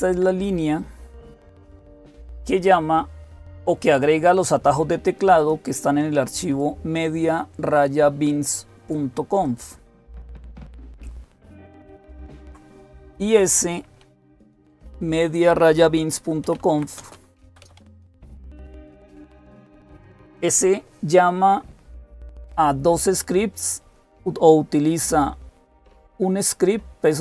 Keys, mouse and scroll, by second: 5.2-6.2 drag, 6.4-10.1 drag, 11.9 ctrl+x, 13.7-14.6 typing, 16.0-18.1 typing, 18.3 Return, 24.0-27.2 drag.